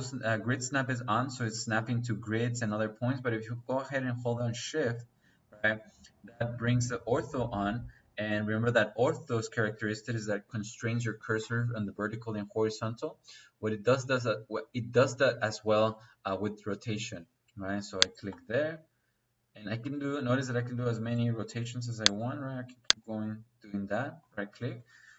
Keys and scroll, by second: 24.6 Escape.